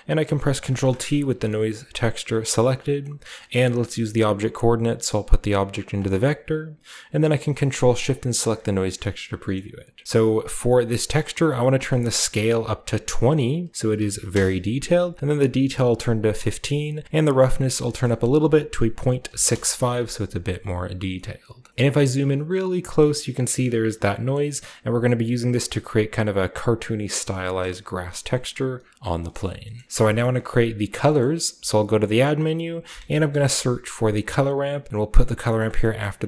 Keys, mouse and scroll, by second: 0.7 ctrl+t, 1.1-1.5 scroll up 1, 1.3 a, 1.7 click, 3.1 scroll up 1, 4.3-5.2 drag, 4.8 scroll up 1, 5.7 click, 6.9-8.1 middle drag, 8.1 ctrl+shift+click, 9.5 scroll up 1, 11.1-11.7 scroll up 1, 11.6 click, 13.9 typing, 14.3 Return, 15.9 click, 17.2 click, 17.3 click, 18.9 click, 19.3 typing, 19.5 Return, 21.1-21.7 middle drag, 21.4-22.2 typing, 21.7-22.8 ctrl+scroll down 1, 22.8-23.4 ctrl+scroll down 1, 23.2-24.1 ctrl+middle drag, 24.4-26.1 ctrl+middle drag, 28.1 click, 29.2-30.0 scroll up 2, 29.4 typing, 30.0-30.9 scroll down 1, 31.6 typing, 32.3 click, 32.9-33.5 typing, 34.6 click, 35.6 click.